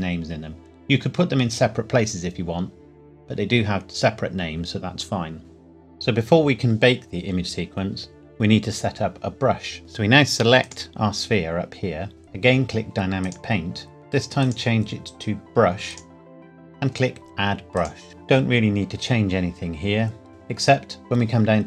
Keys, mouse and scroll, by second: 3.5 scroll down 1, 5.5 click, 7.9 click, 10.6 click, 13.2 click.